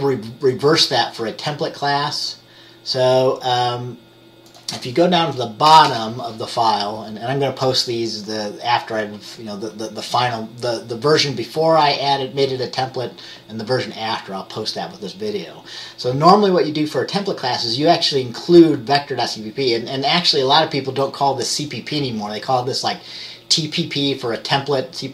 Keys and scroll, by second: 5.8 BackSpace, 6.0 BackSpace.